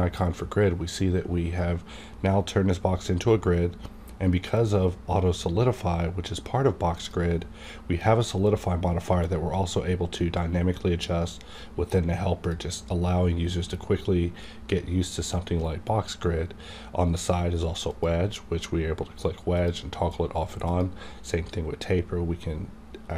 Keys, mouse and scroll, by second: 4.5 click, 7.0-14.7 drag, 17.9-19.6 drag.